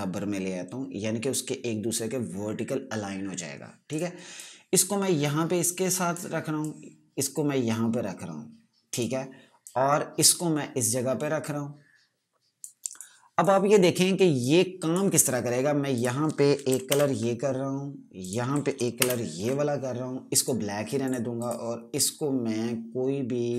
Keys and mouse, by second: 4.4 click, 17.4 alt+BackSpace, 18.7 click, 19.5 ctrl+BackSpace, 20.9 click.